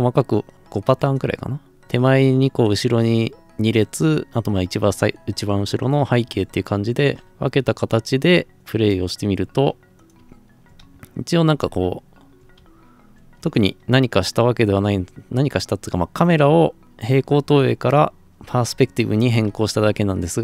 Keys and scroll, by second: 10.2-13.0 typing, 18.5-20.4 typing.